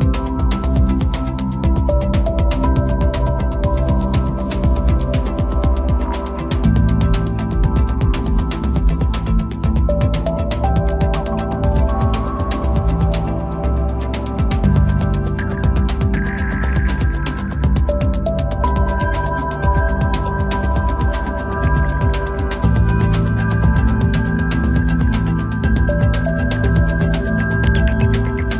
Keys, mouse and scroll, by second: 0.2-0.9 scroll up 2, 0.9 KP_0, 1.8-2.4 scroll up 1, 2.4-3.4 scroll up 1, 3.6-6.6 drag, 7.6-8.6 scroll down 3, 8.6-9.2 middle drag, 9.2-9.6 scroll down 1, 9.6 middle click, 10.2 KP_0, 11.7 click, 12.1-13.4 scroll up 1, 13.4 scroll up 1, 13.6 click, 15.3-18.9 drag, 20.2-21.4 drag, 22.5 click, 23.4-24.6 scroll up 1, 24.6-26.0 drag, 26.0-26.5 scroll down 5, 26.5-27.1 middle drag, 27.1-27.4 scroll down 4, 27.4 middle click, 27.9-28.4 scroll down 1, 28.4 scroll down 2.